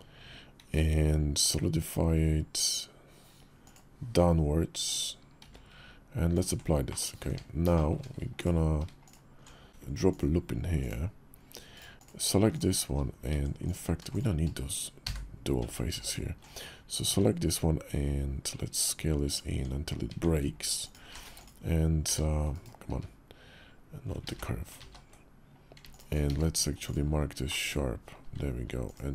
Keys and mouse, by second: 0.4 q, 5.2 q, 6.6 click, 7.0 Tab, 7.5 shift+click, 8.2 alt+click, 8.8 alt+shift+click, 9.9 click, 10.5 click, 11.5-11.9 drag, 12.3 alt+shift+click, 13.1 Tab, 13.4 click, 13.9 shift+click, 14.8 f, 15.3 Tab, 15.8 alt+click, 16.8 s, 19.3 Tab, 19.9 Tab, 20.6 alt+click, 21.0 q, 22.7 q, 24.0 ctrl+z, 24.5 ctrl+z, 26.1 q, 27.2 click.